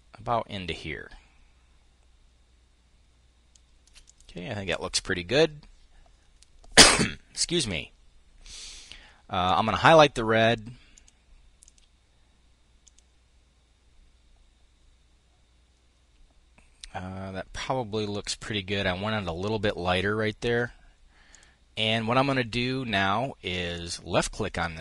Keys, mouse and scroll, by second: 9.0 click, 10.5 click, 11.2 click, 12.4 click, 20.8 click, 23.3 click.